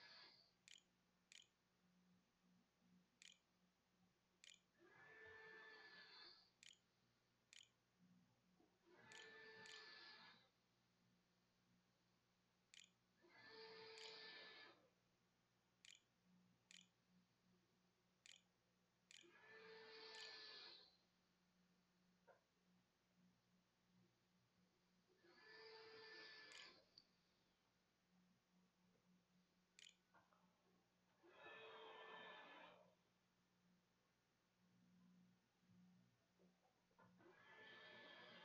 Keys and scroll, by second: 0.0-4.3 typing, 6.0-10.1 typing, 10.1 Tab, 11.2 Tab, 12.5 Tab, 12.9-21.0 typing, 27.6-29.3 typing, 31.3 8.